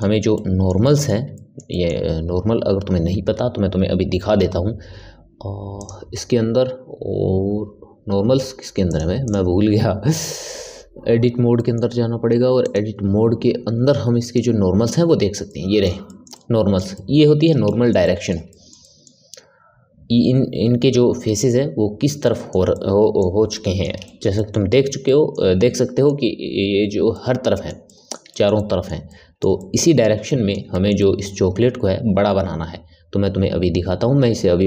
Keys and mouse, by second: 8.6 click, 10.6 Tab, 11.5-12.6 middle drag, 12.6 click, 14.9 click, 15.4-21.8 middle drag, 22.2-34.0 ctrl+middle drag.